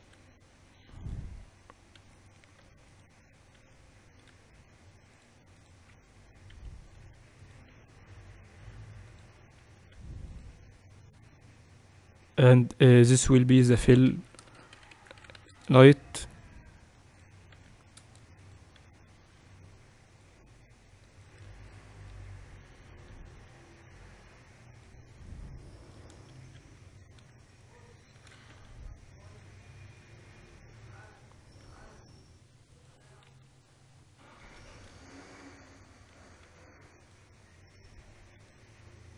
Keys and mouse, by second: 0.5 shift+d, 2.6 g, 4.3 r, 5.8-7.9 drag, 7.2 r, 8.4 s, 10.4 s, 13.0-15.3 drag, 14.8 l, 17.8-21.0 drag, 22.8 KP_7, 24.9-28.8 drag, 27.0 ctrl+2, 28.8 shift+d, 30.6-32.6 drag, 32.3 r, 33.9 KP_3, 36.2 g, 37.1 s, 38.4 g.